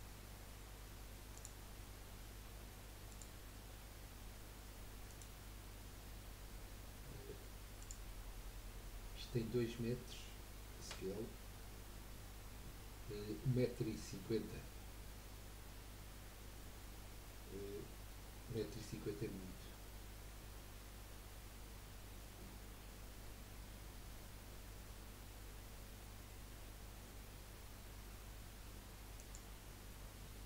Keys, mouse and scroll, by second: 1.3 click, 3.1-5.9 drag, 5.9-6.2 scroll down 2, 7.8 click, 11.2 s, 20.4-28.6 drag, 20.4-28.6 middle drag, 20.4-28.6 right drag, 30.0 scroll up 2.